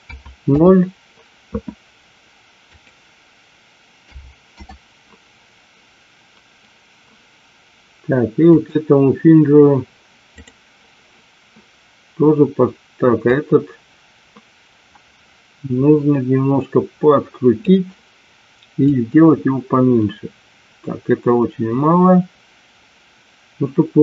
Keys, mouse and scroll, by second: 2.6-5.1 drag, 8.5 click, 10.4 click, 13.2-18.0 drag, 18.9-24.0 drag.